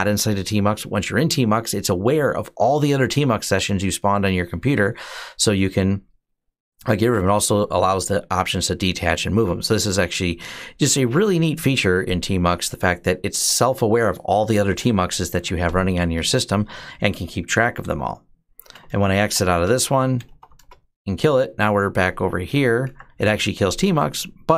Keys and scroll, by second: 17.2-20.7 typing, 22.7 Up.